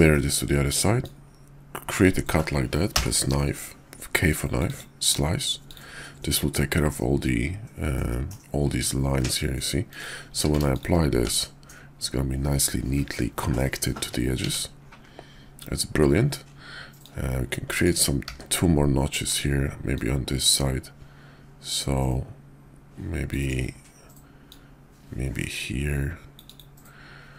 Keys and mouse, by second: 0.1 shift+drag, 1.0-5.6 drag, 5.7 click, 8.1 middle click, 9.8 click, 10.2 q, 11.3 Tab, 14.0 `, 14.4 Tab, 17.0-18.4 drag, 18.4 d, 19.9-23.9 drag, 24.5-27.0 drag.